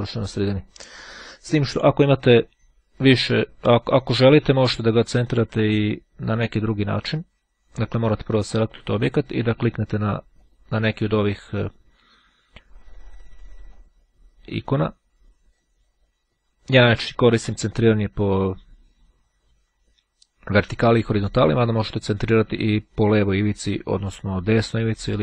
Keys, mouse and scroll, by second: 0.0 click, 4.5 click, 6.4 click, 7.7 click, 9.4 click, 13.8 click, 15.7 click, 16.7-18.0 drag, 21.3-23.2 drag, 24.6 click.